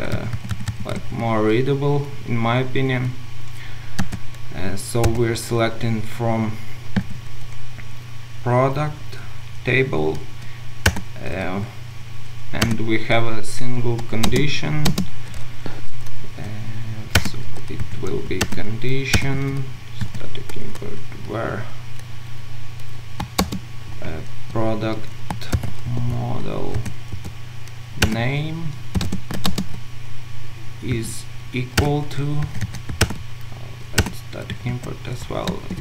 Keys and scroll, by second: 14.2 Return, 14.3 ctrl+shift+space, 17.2 Return, 18.4 Return, 23.5 ctrl+shift+space, 24.8 Escape, 26.7 Escape, 27.2 Return, 29.4 Return, 29.5 ctrl+shift+space, 31.8 Return, 33.0 alt+Return, 35.6 ctrl+space.